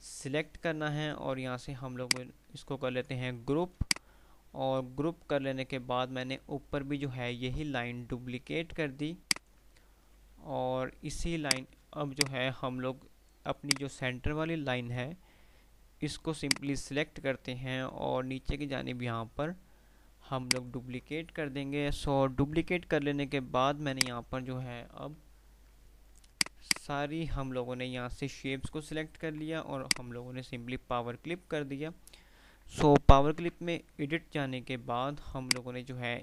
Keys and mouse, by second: 9.3-11.6 ctrl+right drag, 11.6-16.4 drag, 16.4-20.6 drag, 20.6-22.6 ctrl+right drag, 22.6 F3, 23.4 F2, 24.0 click, 24.4 F2, 26.1 click, 26.9-28.9 alt+drag, 29.7 o, 30.0 click, 33.9 d, 34.3 F3, 35.3 click.